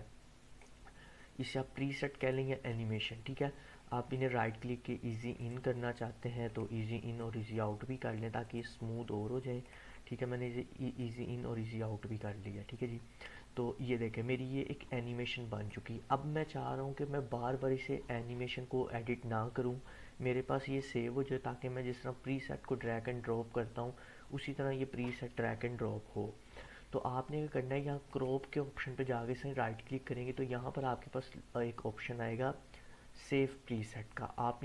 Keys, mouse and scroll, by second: 2.3-3.2 drag, 5.3 right click, 6.4-7.7 drag, 8.4 right click, 9.6-16.0 drag, 28.1 click, 29.0 right click, 29.1 right click.